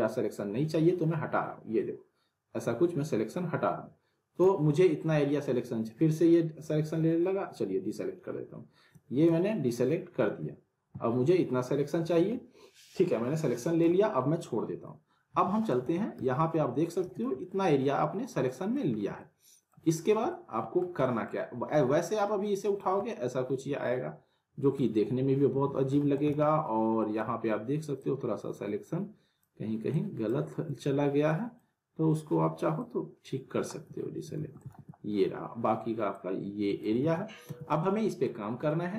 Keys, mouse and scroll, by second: 15.4 alt+w, 15.7 alt+right click, 17.4-19.0 alt+middle drag, 18.9 scroll down 1, 19.2-19.8 alt+middle click, 20.1 scroll up 1, 20.3-20.9 alt+middle click, 22.0-23.0 click, 23.1-24.9 alt+middle drag, 25.5 ctrl+z, 26.0 alt+w, 26.1 alt+right click, 27.0 middle click, 28.0-29.5 alt+drag, 31.3 middle click, 32.8-33.7 alt+drag, 34.1 scroll down 1, 34.4 alt+w, 34.6 alt+right click, 36.1-37.0 click, 37.0 ctrl+z, 37.8-38.5 alt+middle click, 38.5 scroll down 1, 38.6-38.9 alt+middle click.